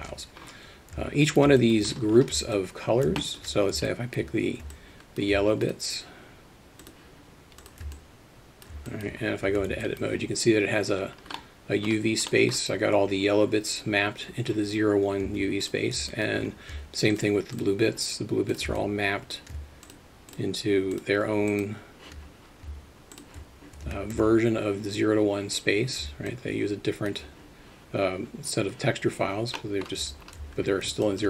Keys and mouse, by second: 0.0 ctrl+space, 1.3 alt+shift+middle drag, 1.6 alt+middle drag, 2.5-3.0 alt+middle drag, 3.2 alt+shift+middle drag, 3.9 middle drag, 4.7-5.2 alt+middle drag, 5.7 shift+click, 6.8 shift+click, 7.6 shift+click, 8.0-8.7 alt+middle drag, 8.9 alt+shift+middle click, 9.6 Tab, 9.8 alt+middle drag, 11.5 middle click, 12.4 middle click, 15.4 Tab, 16.1 alt+middle click, 17.6 shift+click, 18.8-19.4 alt+middle drag, 20.9 shift+click, 21.6 shift+click, 23.9 Tab, 24.2 a, 26.3 alt+middle click, 29.6 middle drag, 30.1 Tab, 31.0 alt+shift+middle drag.